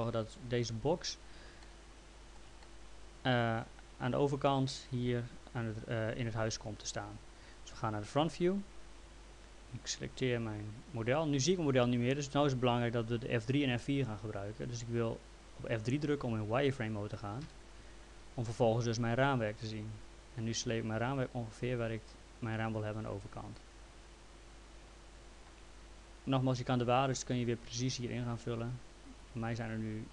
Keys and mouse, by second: 1.6 alt+middle click, 8.1 f, 9.6 click, 17.4 F3, 20.4 click, 23.2 click, 27.9 click, 29.2 click.